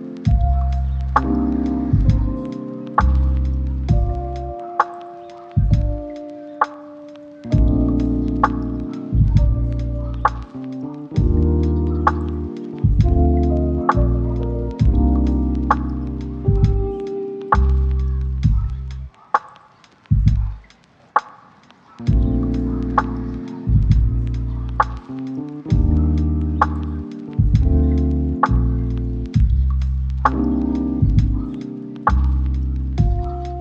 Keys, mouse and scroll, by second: 0.4 double click, 1.0 middle click, 1.9 double click, 4.0 middle click, 5.1 ctrl+middle click, 5.5 shift+middle click, 6.4 shift+middle click, 7.5 double click, 10.9 middle click, 11.9 double click, 14.1 middle click, 18.5 middle click, 19.1 shift+middle click, 19.5 right click, 20.5 2, 20.6 0, 20.7 Return, 21.5 s, 22.1 double click, 25.7 middle click, 26.2 double click, 26.9 middle click, 27.9 double click, 29.9 middle click, 30.7 double click, 31.3 shift+middle click, 31.9 double click.